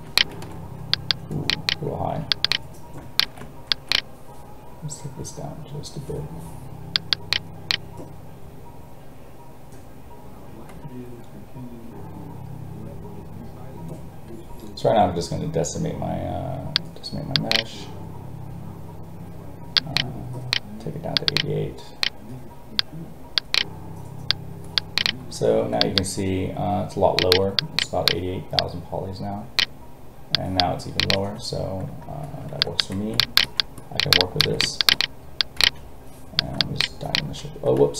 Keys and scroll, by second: 37.8 ctrl+z.